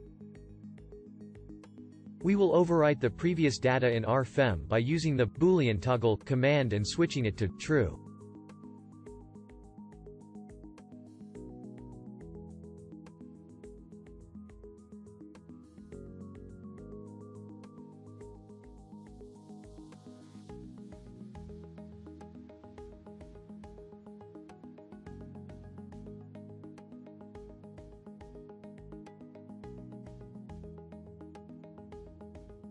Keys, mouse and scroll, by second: 20.9 ctrl+g, 28.6-31.2 shift+drag.